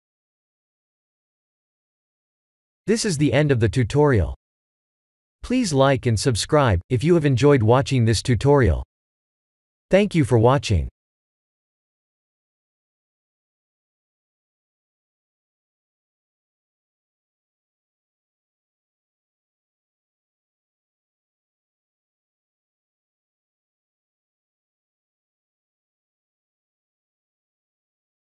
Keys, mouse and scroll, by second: 0.5 middle click, 1.0 middle click, 1.1 middle click, 1.9 middle click, 2.1 shift+middle click, 2.5 shift+middle click, 3.4 click.